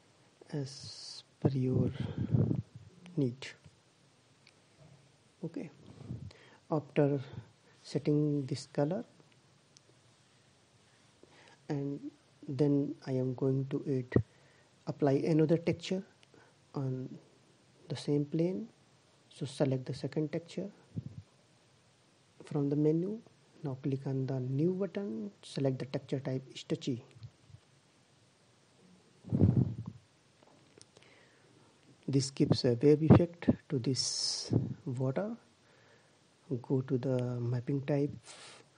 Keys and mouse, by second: 16.2 click, 17.5-19.8 middle drag, 20.3 click, 22.3-25.6 drag, 30.6-35.8 middle drag, 36.9-38.3 drag.